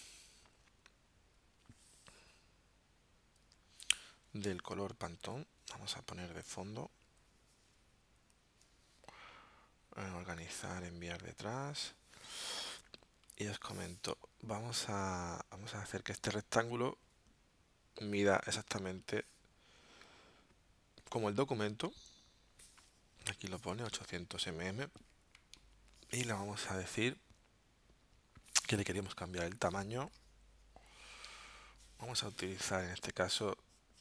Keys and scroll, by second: 23.9 alt+super+0, 31.3 alt+super+0.